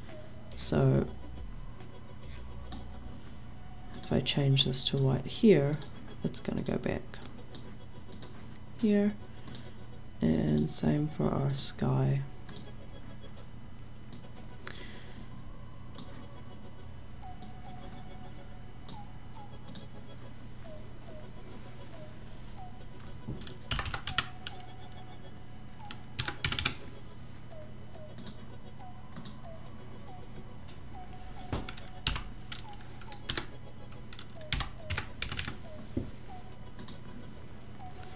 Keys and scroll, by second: 23.7 0, 24.0 d, 25.9-26.9 typing, 32.0 9, 33.2-35.7 typing.